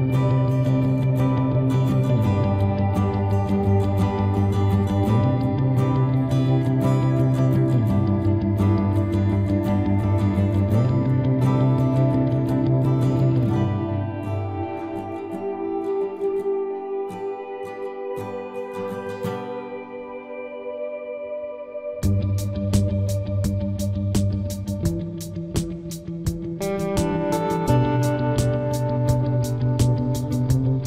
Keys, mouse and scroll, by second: 0.2 z, 0.5 c, 6.1-7.9 right drag, 6.3 ctrl+r, 9.9 right click, 10.3 ctrl+Tab, 11.5 c, 18.4-20.2 right drag, 20.4 i, 21.5-22.6 middle drag, 22.2 z, 22.6-24.3 drag, 23.7 KP_3, 24.7 z, 26.3-27.9 drag, 26.9 c, 27.9 right click.